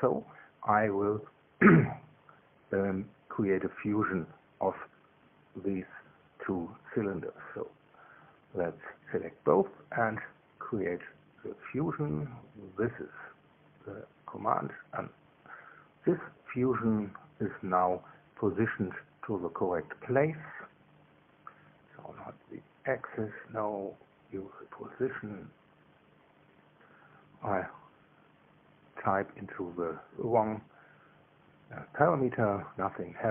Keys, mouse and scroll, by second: 9.5 shift+click, 13.6 click, 15.2 click, 15.4-17.3 middle drag, 17.3 click, 17.5-19.8 middle drag, 19.8 click, 23.2 click, 26.6 click, 30.0 KP_Subtract, 30.7 KP_2, 30.9 KP_0, 31.4 Tab.